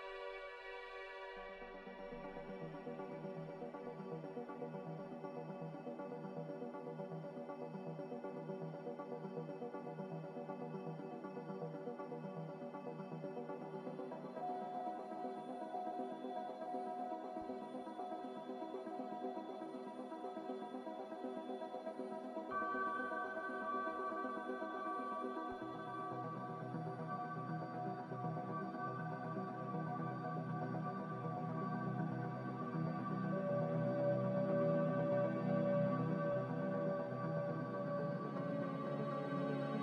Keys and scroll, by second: 2.0 Escape, 12.3-13.2 typing, 13.9 Return, 25.5-26.4 typing, 39.0-39.8 typing.